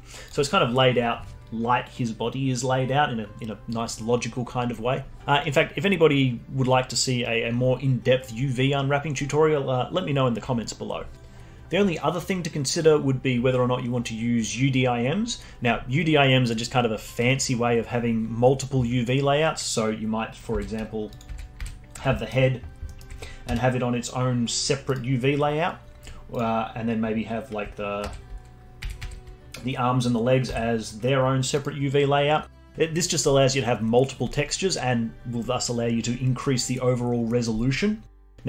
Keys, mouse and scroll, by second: 0.2 click, 21.1 click, 21.3 l, 21.6 l, 21.8-22.1 scroll down 2, 22.1 alt+middle click, 22.6 scroll down 1, 22.8 alt+middle click, 23.5 g, 26.3 click, 26.5 scroll up 2, 28.1 l, 28.9 l, 29.0 l, 30.5 g.